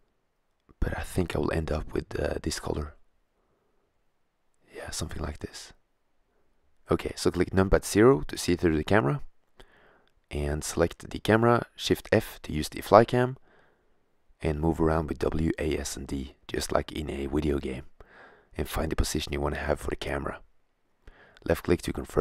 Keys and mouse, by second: 1.2 right click, 1.5 middle click, 1.8 click, 7.6 KP_0, 9.7 shift+z, 10.3 shift+f, 20.7 click, 21.1 click, 21.5 click, 21.7-22.2 middle drag.